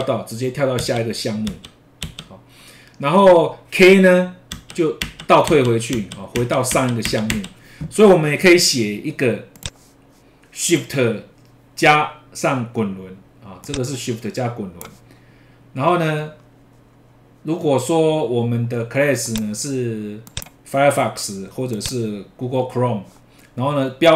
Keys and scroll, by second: 4.5-6.7 typing.